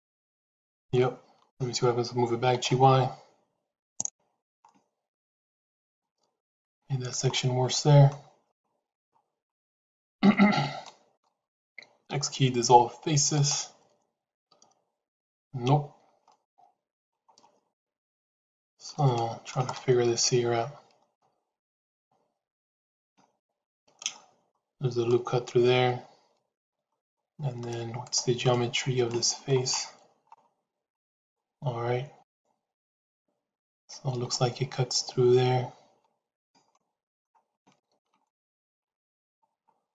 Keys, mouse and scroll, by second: 2.3 g, 4.6-5.8 middle drag, 6.6 ctrl+z, 7.2 middle click, 10.7 middle click, 11.9 x, 16.2 middle click, 17.6-18.8 middle drag, 19.0 shift+middle click, 19.6-23.0 middle drag, 23.3 shift+middle click, 25.0-26.6 middle drag, 27.9 click, 28.4 middle click, 29.0 shift+middle click, 31.0 click, 35.9 shift+z, 36.6 middle click, 37.5 shift+middle click, 38.2 middle click.